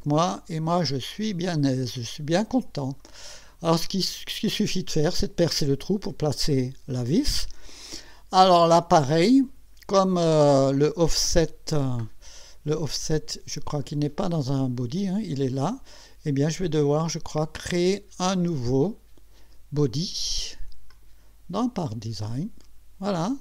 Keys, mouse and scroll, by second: 1.1 click, 2.0 click, 3.4 scroll down 1, 3.5 scroll up 1, 3.8-5.2 drag, 6.5-7.6 drag, 8.6 scroll down 1, 11.8-12.1 scroll down 1, 12.9 click, 13.8 click, 15.6 click, 16.5 click, 17.9 click, 20.9 click, 21.9 click.